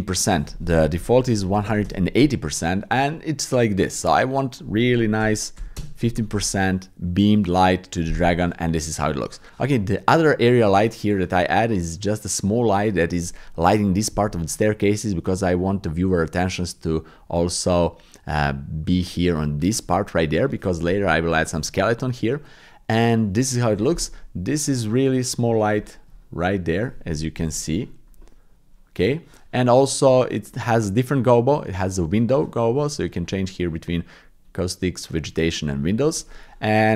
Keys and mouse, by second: 0.1-1.9 drag, 4.5-5.8 drag, 10.5 click, 24.5 click, 25.9 shift+click, 27.3 KP_Decimal, 28.3 click, 32.7-36.0 drag.